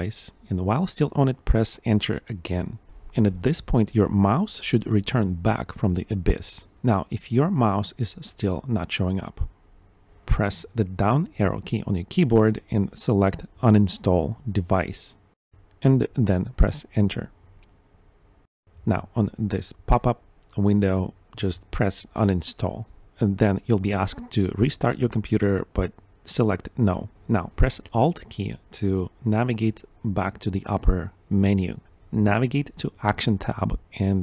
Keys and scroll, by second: 17.1 Down, 17.4 Tab, 19.9 Return, 24.9 Tab, 26.0 Return.